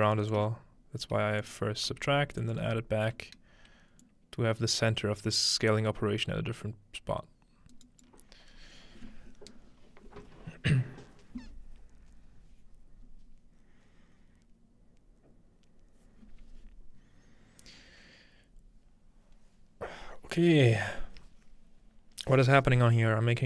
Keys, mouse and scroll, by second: 0.1-1.4 shift+right drag, 1.9 m, 2.4 click, 7.7 click.